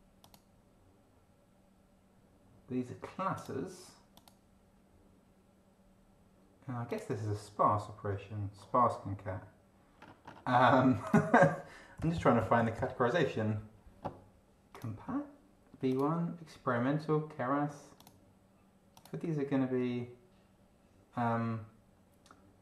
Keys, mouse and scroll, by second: 0.2 click, 3.3 click, 4.1 click, 6.9 click, 10.0-10.7 scroll up 2, 11.0 click, 11.7-13.1 typing, 14.7 click, 15.9 click, 18.0 click, 19.0 click.